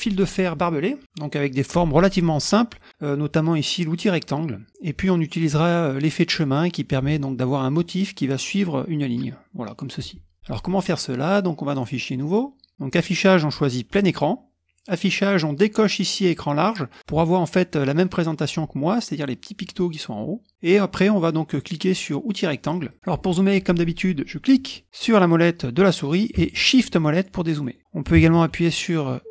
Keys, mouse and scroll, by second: 11.7 click, 12.3 click, 12.9 click, 14.0 click, 14.2 click, 14.9 click, 17.0 click, 22.7 click, 24.8-25.3 scroll up 1, 27.1-28.5 shift+middle drag, 27.4 shift+scroll, 28.6-29.3 shift+scroll up 2.